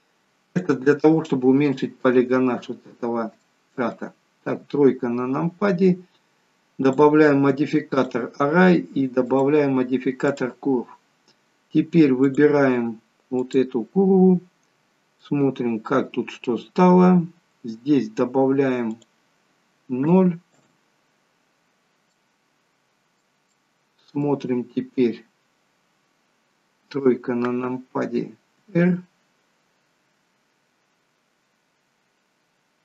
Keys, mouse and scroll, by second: 0.4 click, 3.4 shift+middle click, 4.5 KP_3, 6.8 click, 9.2 click, 11.0-12.3 scroll down 10, 12.3 click, 15.2 middle click, 17.2-18.1 scroll up 2, 18.1-18.9 scroll up 2, 18.9 click, 22.1 middle click, 26.8 KP_3, 28.6 r.